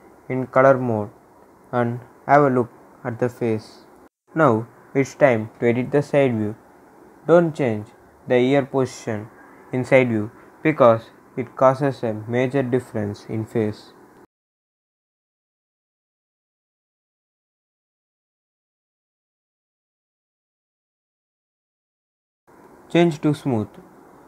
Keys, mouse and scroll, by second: 0.7-2.7 drag, 3.6 scroll up 1, 4.7 click, 4.7-9.6 drag, 9.6 scroll down 1, 10.7-12.4 drag, 12.4 ctrl+z, 12.8 ctrl+s, 14.1 click, 14.5 scroll down 1, 15.8 click, 21.2-22.9 drag, 23.2 scroll up 1, 24.1 click.